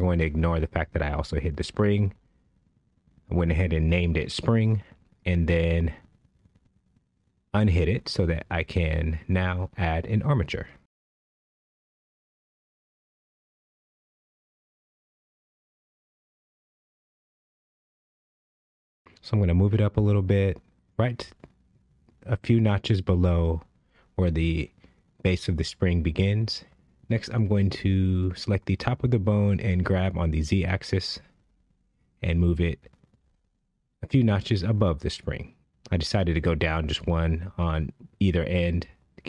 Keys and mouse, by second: 1.5 h, 1.6 click, 1.9 h, 2.2 click, 2.5 h, 3.7 click, 4.6 click, 6.4 shift+a, 19.1 click, 19.9 g, 20.3 z, 26.9 Tab, 27.4 click, 28.6 g, 34.4 shift+middle click, 35.8 click, 36.8 g.